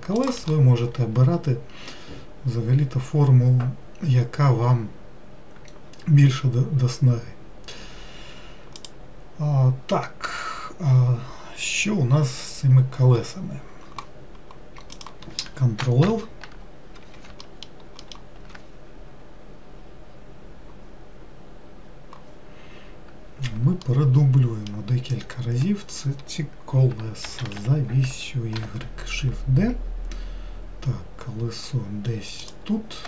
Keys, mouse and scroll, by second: 15.0-16.1 drag, 16.1 ctrl+l, 17.5 alt+middle click, 19.7-21.4 scroll down 3, 21.4-23.4 scroll down 2, 23.9-27.0 shift+middle drag, 27.3 shift+d.